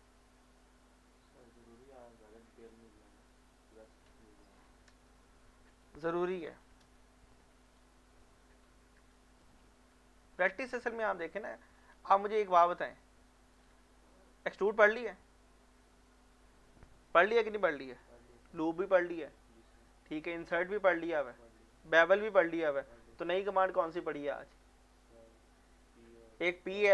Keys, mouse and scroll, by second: 3.7 click, 9.9 middle click, 12.0 Tab, 13.0 middle click, 13.5 click.